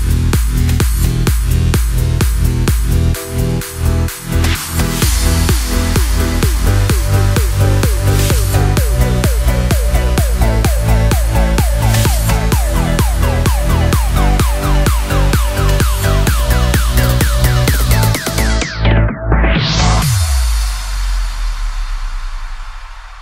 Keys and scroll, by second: 3.5 super+=, 4.5 super+z, 4.9 super+-, 19.7 ⟲, 19.8 Escape, 21.8 Escape.